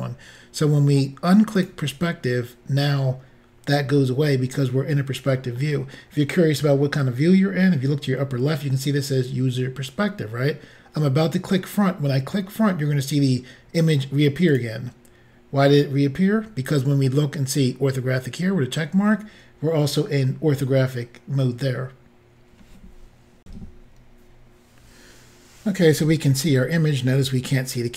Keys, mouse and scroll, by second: 1.6 click, 4.5 middle click, 14.5 click, 23.4 Insert.